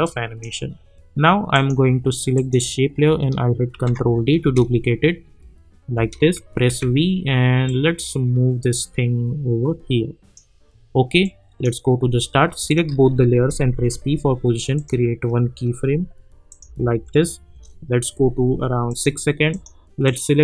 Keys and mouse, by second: 0.0-1.5 drag, 3.7 ctrl+d, 4.4 space, 6.6 v, 7.6-12.7 drag, 13.7 p, 14.7 click, 16.7 -, 16.9 -, 18.9-20.4 drag.